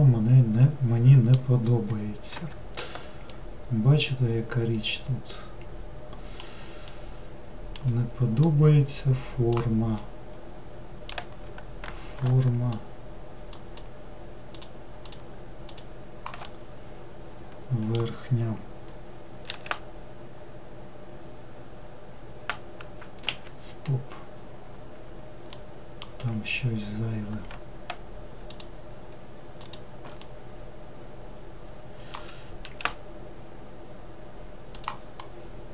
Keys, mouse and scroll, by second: 1.9-2.4 scroll up 1, 3.3-8.5 middle drag, 8.5 click, 10.0-12.3 middle drag, 12.3 shift+drag, 13.6 shift+click, 14.6 shift+click, 15.1 shift+click, 15.7 shift+click, 16.5-19.5 middle drag, 19.5 s, 25.5-26.5 middle drag, 26.5-28.5 scroll up 2, 28.5 shift+click, 29.6 shift+click, 30.3-32.7 middle drag, 32.7 s, 35.2-35.7 middle drag.